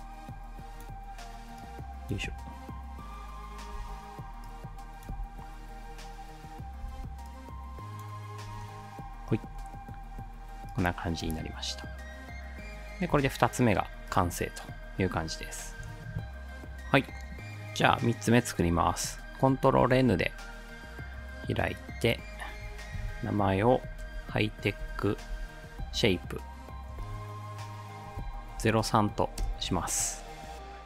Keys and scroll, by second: 2.3 space, 3.8 space, 5.2 space, 6.8 space, 8.5 ctrl+s, 11.3 space, 13.2 space, 19.8 ctrl+n, 23.6-26.6 typing, 28.2-28.9 typing, 29.4 Return.